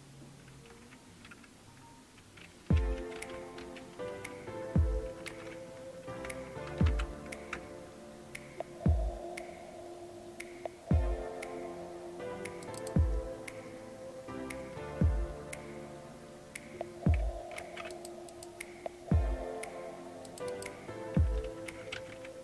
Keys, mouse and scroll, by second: 5.1 alt+super+r, 6.7 Down, 6.8 Down, 7.5 Return, 12.7 click, 17.6 super+w, 17.9 click, 20.3 click, 21.2-22.4 typing.